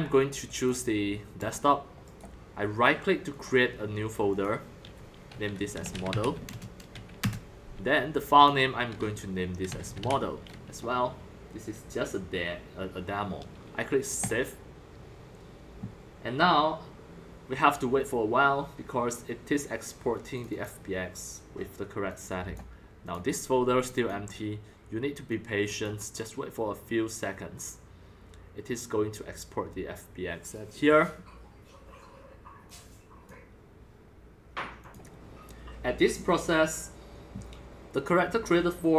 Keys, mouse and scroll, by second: 0.1 click, 1.4 click, 2.0 right click, 2.9 right click, 3.4-5.5 drag, 5.7-6.2 typing, 6.4 Return, 7.3 Return, 8.3 click, 9.6-10.0 typing, 14.1 click, 14.2-19.3 drag, 20.3 click, 20.5 click, 20.6-21.1 drag, 22.0 click, 22.2 click, 23.0 click, 23.8 click, 23.9 click, 24.6 middle click, 25.3-30.8 drag, 32.6-38.9 drag.